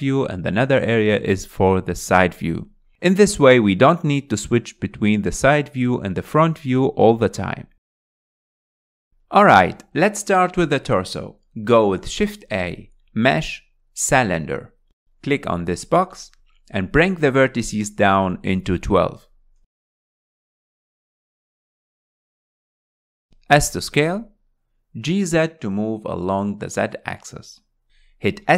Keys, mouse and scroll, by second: 0.1 n, 2.6 KP_3, 3.5-4.2 scroll up 7, 4.3-7.4 shift+middle drag, 7.4 KP_1, 8.2-9.2 scroll up 10, 9.2-11.1 shift+middle drag, 11.1 scroll down 2, 12.6 shift+a, 15.0 alt+z, 17.6-22.2 drag, 22.9 click, 23.5 s, 26.4 g.